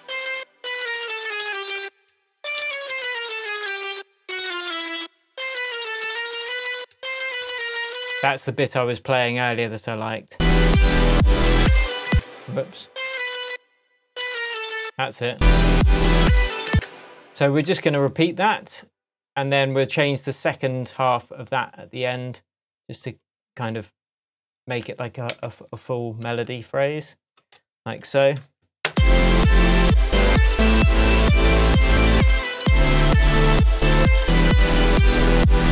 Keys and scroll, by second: 0.5 Down, 1.8 BackSpace, 2.6 Down, 12.1 space, 14.2 Down, 16.7 space, 25.3 super+d, 28.2 shift+super+j, 28.8 super+space, 29.3 space.